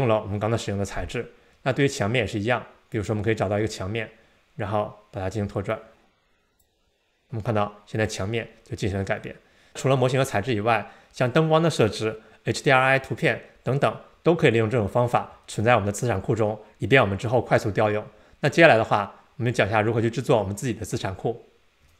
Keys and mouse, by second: 3.0 click, 5.7-6.7 drag.